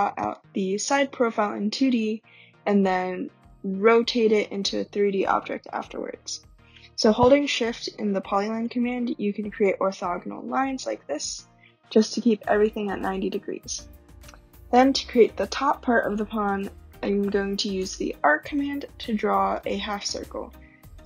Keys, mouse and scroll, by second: 0.2 right click, 7.5-10.2 drag, 10.2-10.5 right drag, 16.6-17.8 typing, 18.9 scroll, 19.4 typing.